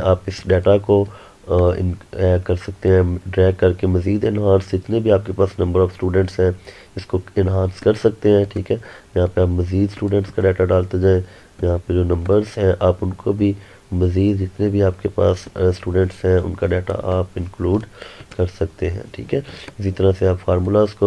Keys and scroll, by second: 17.9 ctrl+Num_Lock.